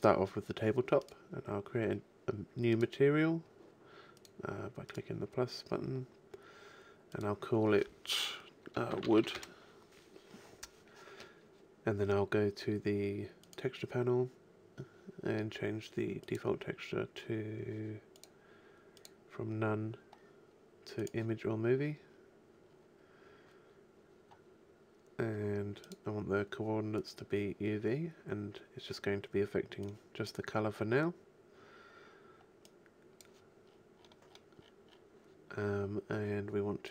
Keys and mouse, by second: 1.0-4.6 drag, 4.9-6.6 drag, 7.1 click, 8.7 click, 9.1 o, 12.5 click, 13.4-15.0 drag, 16.2-18.0 drag, 18.2-20.7 drag, 34.2 click, 34.4-36.9 middle drag.